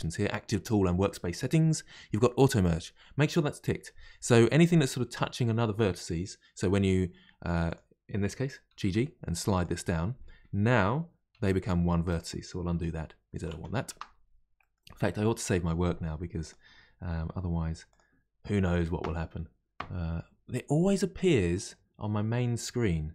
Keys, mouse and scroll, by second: 2.6 click, 7.7 click, 8.7 g, 10.7 click, 11.3 g, 13.5 ctrl+z, 13.7 ctrl+z, 14.5-16.4 middle drag, 16.4-19.4 drag.